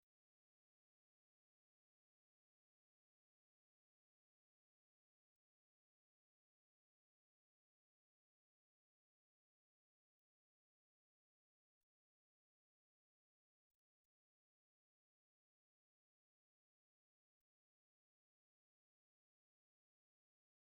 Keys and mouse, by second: 0.3 middle click, 2.9 shift+middle click, 3.3 middle click, 3.8 shift+middle click, 4.4 middle click, 5.8 middle click, 6.7 space, 9.3 click, 13.0 a, 13.2 middle click, 14.2 middle click, 15.4 o, 16.1 right click, 16.9 middle click, 17.7 right click, 18.8 right click, 19.9 right click.